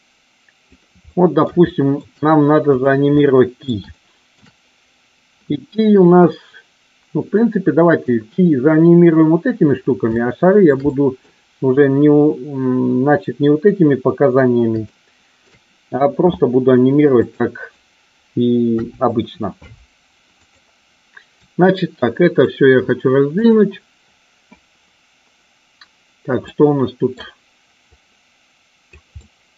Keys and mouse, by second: 0.0 click, 1.1-2.0 middle drag, 3.2 middle click, 3.8-4.3 shift+middle drag, 7.2-8.0 middle drag, 10.1-10.6 shift+middle drag, 10.7-11.2 middle drag, 14.8 shift+middle click, 18.7 Delete, 20.5 drag, 21.3-22.5 drag, 26.5-27.1 middle drag, 28.0-28.8 drag, 29.1-29.5 middle drag.